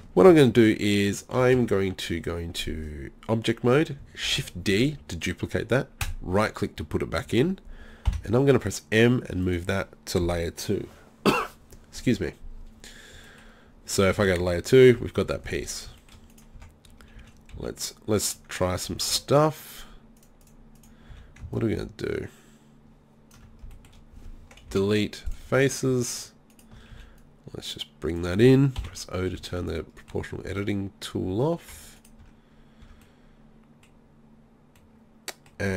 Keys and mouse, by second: 1.6 Tab, 4.3 shift+d, 8.1 m, 14.2 click, 14.2 2, 15.3 1, 16.3 right click, 16.6 Tab, 17.2 z, 17.7 z, 18.8 z, 19.1 z, 20.2-23.3 drag, 21.1 z, 24.7 Delete, 26.9 z, 28.8 o, 30.5 z, 31.2 z, 31.8 Tab, 32.2 Tab, 32.8 Tab.